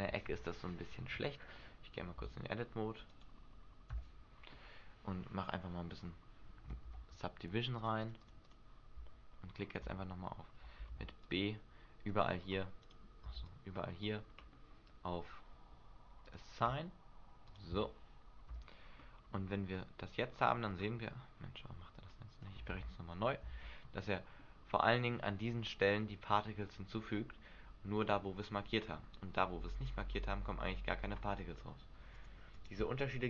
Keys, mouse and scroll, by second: 2.3 Tab, 3.2 right click, 4.1 Tab, 6.8 a, 7.0 a, 7.9 click, 8.1 click, 8.6 click, 9.1 Tab, 10.0 Tab, 11.0 b, 13.0 right click, 13.3 b, 16.4 click, 17.6 click, 18.7 Tab, 20.4 scroll up 4, 22.3 click, 22.8 alt+a, 23.7 alt+a, 24.2 middle click, 25.1 middle click, 25.5 scroll down 1, 26.6 scroll down 3, 26.8 middle click, 28.4-29.1 scroll up 4, 32.2 click, 32.7 click.